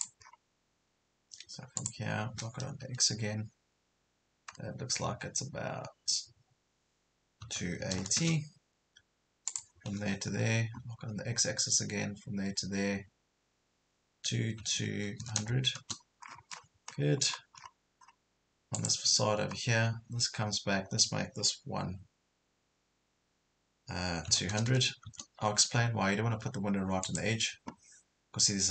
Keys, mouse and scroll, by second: 0.2 scroll up 1, 1.8 click, 2.8 Right, 7.4 KP_2, 7.8 KP_8, 9.5 click, 10.3 KP_0, 14.2 KP_2, 15.2 KP_0, 16.3 scroll down 1, 17.0 scroll down 1, 17.3 scroll up 1, 18.8 click, 24.3 KP_2, 24.5 KP_0, 27.1 click.